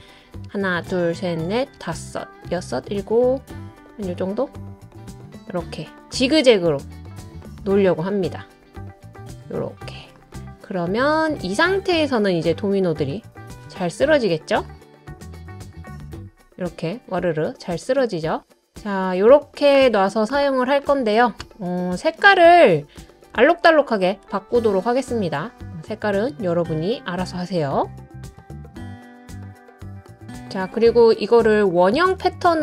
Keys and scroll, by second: 0.5 Up, 0.8 Up, 1.1 Up, 1.4 Up, 1.8 Up, 2.5-8.3 Up.